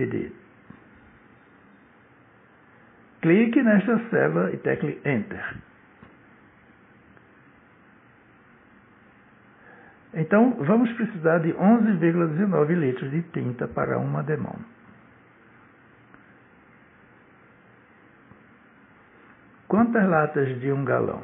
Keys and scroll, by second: 1.9 /, 8.3 Return.